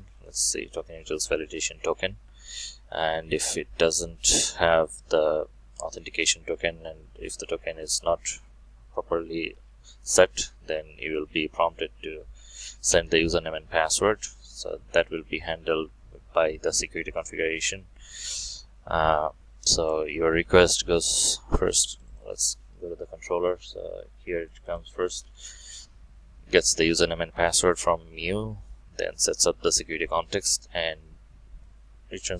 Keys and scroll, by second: 14.4 alt+1, 24.7 ctrl+shift+F12.